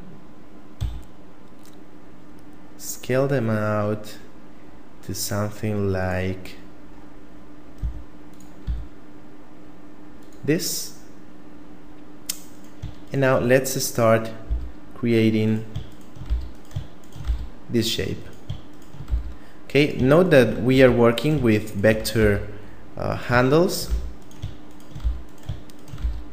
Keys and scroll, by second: 7.8 s, 8.6 s, 14.5 f, 16.3 f, 17.2 f, 19.1 f, 21.1 f, 22.2 f, 23.9 f, 25.0 f, 26.0 f.